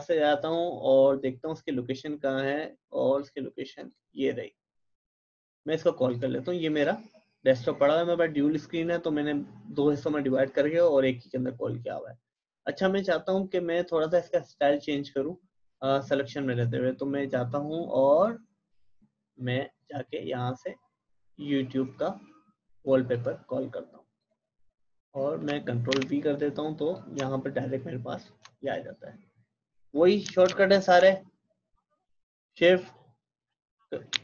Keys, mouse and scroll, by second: 0.5-1.3 typing, 2.9-3.7 typing, 3.2 click, 6.1 click, 16.5-21.9 drag, 17.8-18.6 typing, 19.8-20.6 typing, 21.7-22.5 typing, 21.9 right click, 23.1 click, 25.9 ctrl+v, 26.9-34.1 drag, 34.1 ctrl+shift+[.